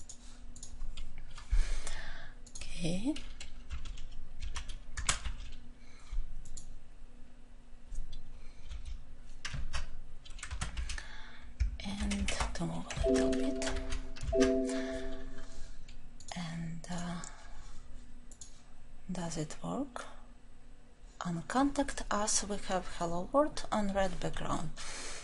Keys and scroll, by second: 9.6 ctrl+v, 14.2 ctrl+alt+l.